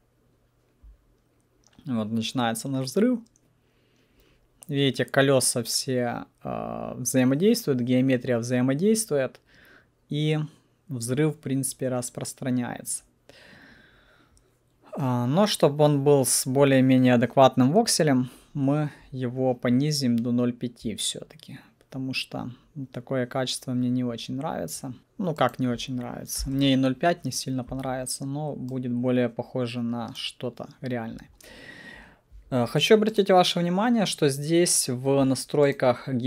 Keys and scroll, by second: 25.0 Escape, 26.4 5, 26.6 Return.